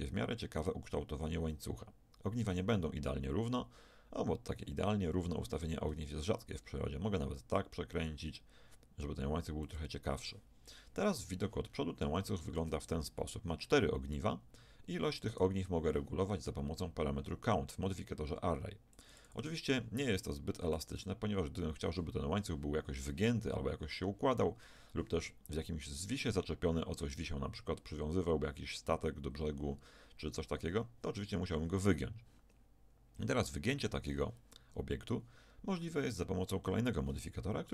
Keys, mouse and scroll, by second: 0.4-2.2 middle drag, 5.6 r, 10.7 KP_1, 11.6-14.0 middle drag, 15.3-17.8 right drag, 19.0-23.8 drag.